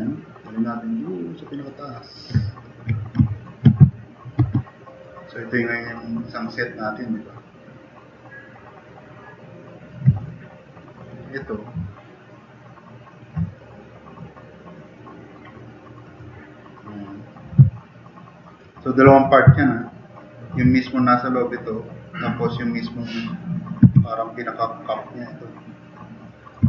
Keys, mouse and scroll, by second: 4.4 alt+q, 4.9 drag, 5.2 click, 5.7 drag, 6.1-6.6 drag, 6.8 click, 7.2-9.9 drag, 10.2 click, 10.8 click, 17.7-18.0 middle drag, 18.4 click, 18.8 click, 19.7 click, 19.9 drag, 23.8 w.